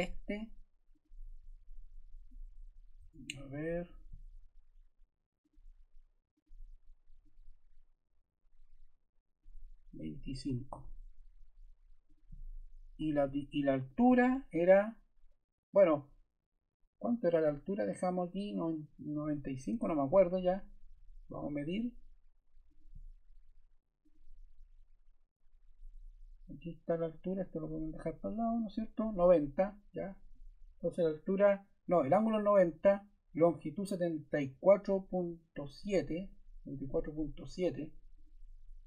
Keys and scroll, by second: 2.9 Escape, 10.4 2, 10.7 5, 12.9 d, 19.6 Escape.